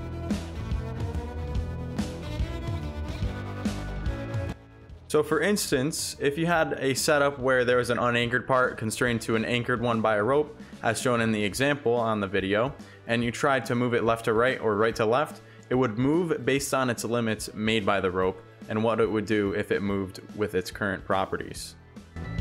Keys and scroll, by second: 4.5 shift+w, 4.6 Pause, 19.1 s, 19.4 w, 19.8 ctrl+z.